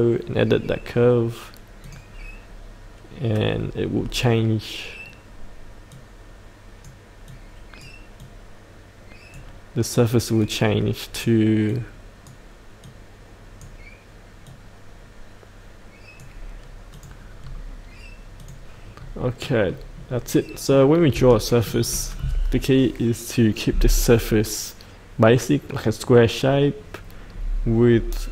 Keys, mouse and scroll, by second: 3.7-5.8 scroll down 2, 5.8-16.2 drag, 17.4 scroll up 1, 18.3 click, 18.9-19.4 scroll up 1, 19.4 middle click, 20.0-20.3 scroll down 1, 20.3 middle click, 21.3 shift+middle click.